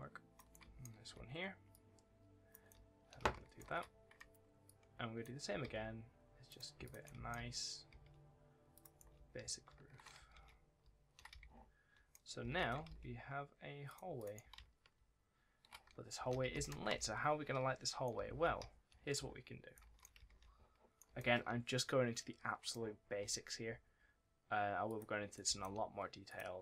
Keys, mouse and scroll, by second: 0.3 right click, 0.5 s, 1.6 click, 2.6 w, 4.5 click, 5.5 ctrl+d, 6.3 click, 6.7 ctrl+click, 6.9 ctrl+d, 7.0 s, 8.6 click, 8.8 right click, 9.0-11.3 typing, 12.7 shift+d, 13.7 click, 14.3 w, 14.8 shift+a, 16.0 a, 16.7 ctrl+s, 17.9 right click, 18.0 s, 18.5 w, 19.6 right click, 20.0-21.5 typing, 20.8 right click, 21.6 right click, 23.1-23.5 scroll up 1, 23.5 scroll down 1, 23.8-24.2 scroll up 1, 24.7 click, 25.2 right click, 25.3 w, 26.1 click.